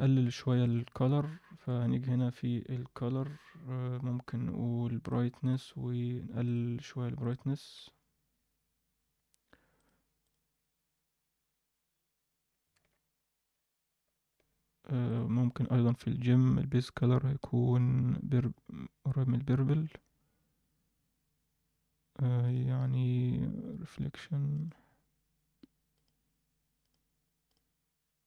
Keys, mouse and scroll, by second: 0.2 shift+middle click, 0.9-3.0 scroll up 2, 1.6 shift+a, 6.4 click, 7.1 click, 8.3-9.7 scroll up 1, 9.7 click, 9.7 scroll up 1, 12.8 alt+a, 15.1 click, 16.0-16.8 scroll down 1, 16.8 click, 16.8 scroll down 1, 19.8 alt+a, 22.4 click, 25.9 click.